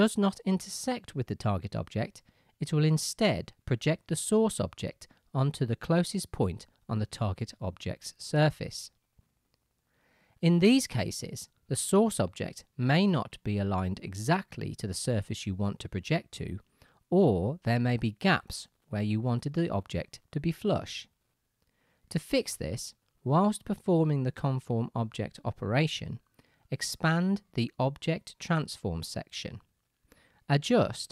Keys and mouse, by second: 13.4-19.6 shift+drag, 19.6-25.5 right drag, 26.1-28.5 drag, 28.5-31.1 middle drag.